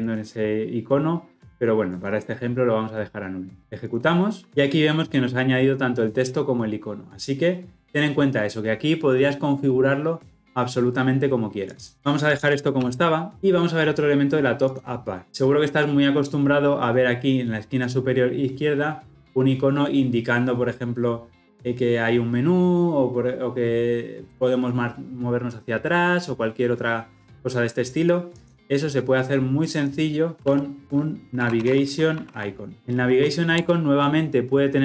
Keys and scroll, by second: 3.9 shift+F10, 12.8 ctrl+z.